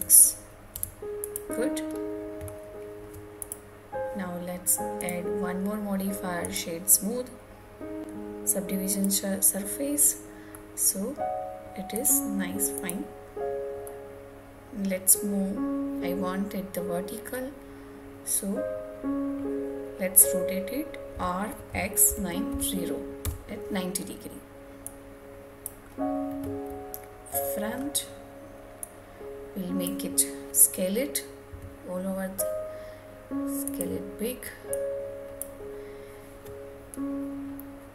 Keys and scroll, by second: 22.8 Return.